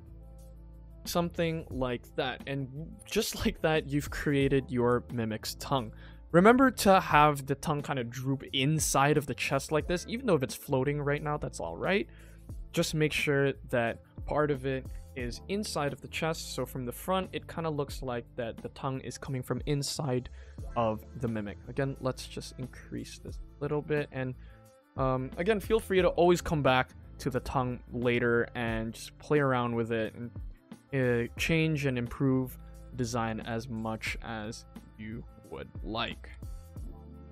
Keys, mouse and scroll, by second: 0.0-0.5 scroll down 3, 0.3 middle drag, 0.6 ctrl+s, 0.8 middle click, 1.2 scroll down 1, 1.4 middle click, 1.7-2.4 scroll up 4, 1.9 middle click, 2.4 middle click, 2.9 shift+middle click, 3.1 shift+middle click, 3.4 click, 3.8 middle click, 4.2 shift+middle click, 4.6 scroll up 1, 4.9 ctrl+s, 5.0 middle click, 5.5 shift+middle click, 5.7 scroll down 2, 5.8-6.3 scroll up 3, 6.4 shift+middle click, 6.7 middle click, 7.2 shift+middle click, 8.0 ctrl+s, 8.9 scroll down 2, 9.2-9.7 scroll up 2, 9.7 scroll down 1, 9.9 g, 10.8 middle click, 11.3 Tab, 11.8 middle click, 12.4 Tab, 12.7 middle click, 13.0 Tab, 13.3 middle click, 13.9 click, 14.2 ctrl+s, 14.8 KP_0, 15.7 middle drag, 16.1 scroll down 1, 16.1 scroll up 1, 16.2 scroll down 2, 16.6-17.2 middle drag, 17.4 shift+middle drag, 17.7-18.3 middle drag, 21.3 click, 21.7 s, 22.6 g, 23.6 Tab, 24.0 middle click, 24.6 alt+click, 25.7 o, 26.0 g, 28.9 alt+click, 29.3 alt+click, 29.9 g, 32.1 alt+click, 32.4 g, 34.2 alt+click, 34.7 alt+click, 35.0 alt+click, 35.6 alt+click, 36.1 g.